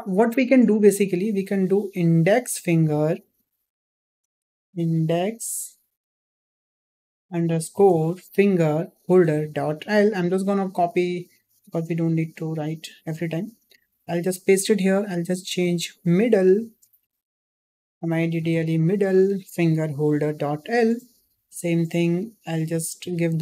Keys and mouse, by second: 11.4 ctrl+c, 12.8 click, 13.7-20.8 ctrl+drag, 17.4 d, 21.5 click, 22.5-23.4 ctrl+drag.